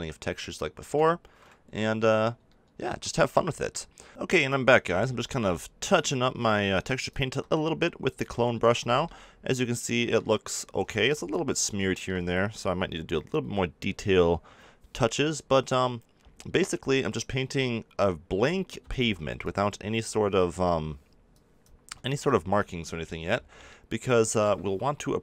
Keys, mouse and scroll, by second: 1.6 KP_7, 4.1-9.9 drag, 9.9-18.8 middle drag, 18.8-22.0 drag, 22.0 ctrl+z, 22.5 middle click, 23.3 middle click.